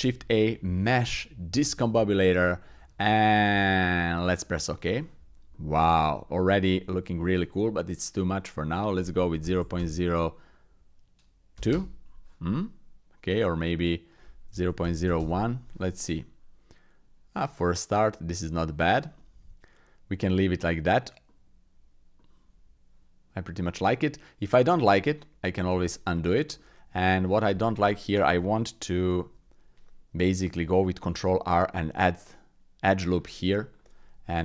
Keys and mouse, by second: 5.5 click, 6.2 shift+click, 6.5 click, 8.7-11.7 drag, 12.5 click, 14.1-15.2 drag, 16.2 click, 18.6 shift+click, 19.1-20.3 drag, 21.2 click, 22.2-22.8 drag, 23.9 click, 25.7 ctrl+z, 26.6 shift+click, 27.1 middle click, 27.5 Tab, 31.1 ctrl+r, 34.3 ctrl+r.